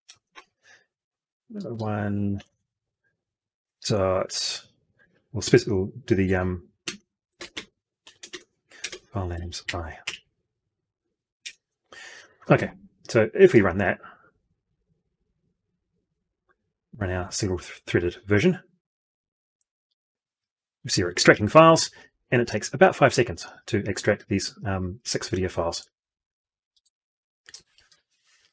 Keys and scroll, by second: 0.2 ctrl+v.